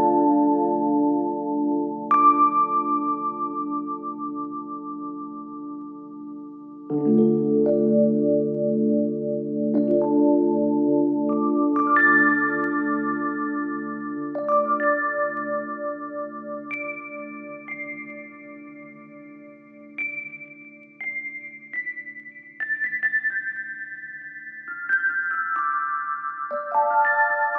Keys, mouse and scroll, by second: 4.7 t, 12.3-14.6 click, 17.1 ctrl+c, 18.6 ctrl+v, 19.4-21.5 drag, 22.4 ctrl+v, 23.4-25.1 drag, 25.9-26.4 drag.